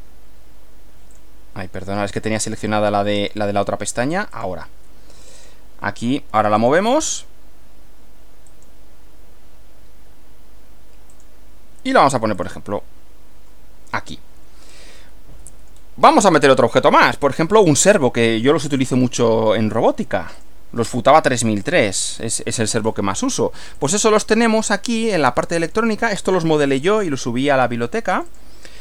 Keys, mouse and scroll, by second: 1.2 click, 2.1 click, 3.2 click, 4.3 click, 5.4 click, 6.6 click, 8.5 click, 11.1 click, 12.4 click, 15.0 middle click, 15.7 scroll down 1, 16.3 middle click, 19.0 middle click, 20.3 click, 21.7 click, 23.8 click, 25.7 click, 28.1 click.